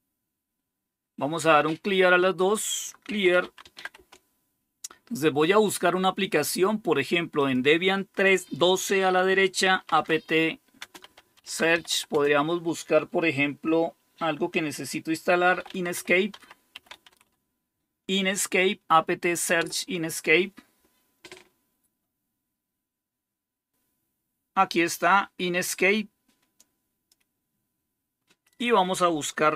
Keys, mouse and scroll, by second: 2.3 click, 2.7-4.1 typing, 7.2 click, 7.2-12.5 typing, 15.2-17.6 typing, 19.5 typing, 23.7-25.7 scroll up 1, 25.7-27.8 drag, 28.4 click.